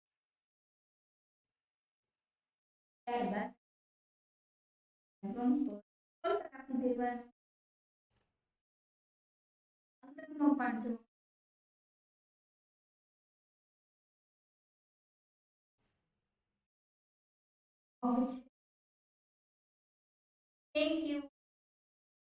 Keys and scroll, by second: 21.7 ctrl+z.